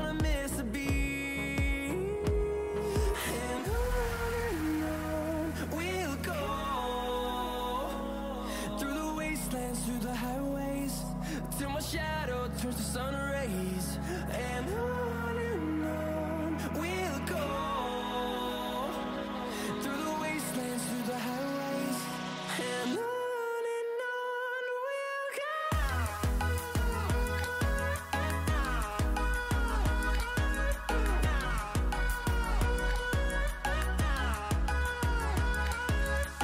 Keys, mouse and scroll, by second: 1.1-1.4 scroll up 1, 3.2 click, 8.2-14.0 drag, 14.6 click, 16.1-26.4 drag, 26.4-29.6 drag, 30.1 scroll down 1, 31.0 click, 32.8 right click, 33.7-36.4 drag.